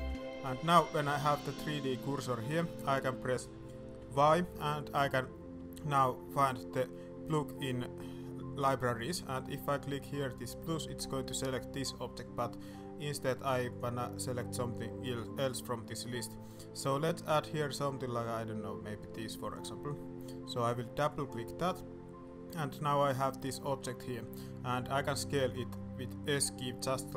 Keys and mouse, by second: 0.5 middle click, 0.9 middle click, 1.6-2.2 middle drag, 2.5 shift+middle click, 2.8 shift+middle drag, 3.9 y, 21.0 middle click, 22.2-23.0 middle drag, 25.3 s.